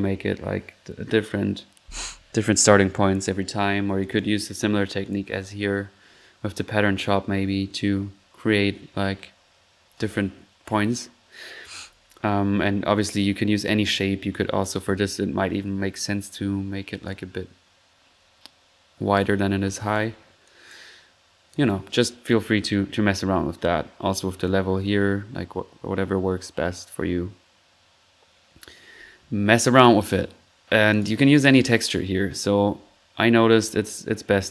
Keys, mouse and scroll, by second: 4.0 click, 5.0 click, 8.6 middle click, 9.4 middle click, 11.3-11.8 middle drag, 12.3 typing, 12.5 middle click, 12.7 middle drag, 13.0-13.5 drag, 14.3 click, 17.1-19.4 drag, 19.5-20.0 middle drag, 19.8 1, 20.5-21.1 drag, 22.4-22.7 drag, 24.4 click, 29.8-30.2 drag, 30.7 middle click, 30.9-31.4 drag, 33.5-34.5 drag.